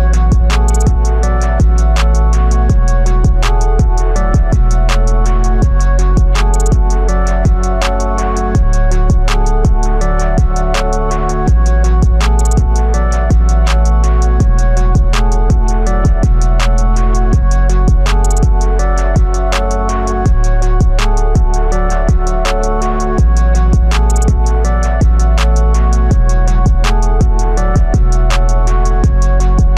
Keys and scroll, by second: 20.2 ctrl+z.